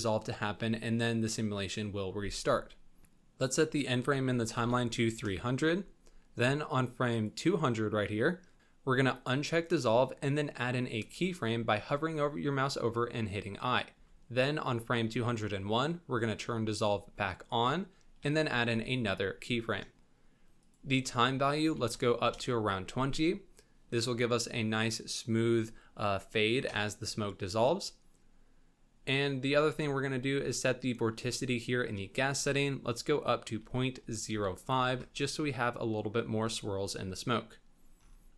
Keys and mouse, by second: 3.4-5.2 drag, 4.5 KP_0, 7.1 click, 9.2 click, 11.2 i, 13.9 Right, 16.3 click, 18.3 i, 20.6-22.3 drag, 30.9-35.0 drag.